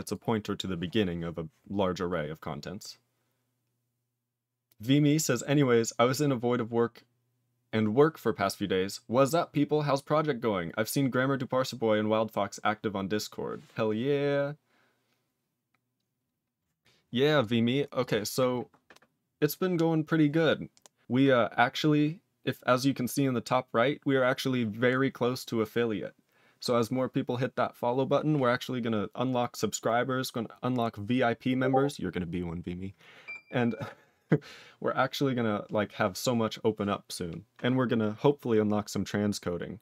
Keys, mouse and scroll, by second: 0.0 click, 17.3 click, 17.9 click, 17.9 click, 18.5 click.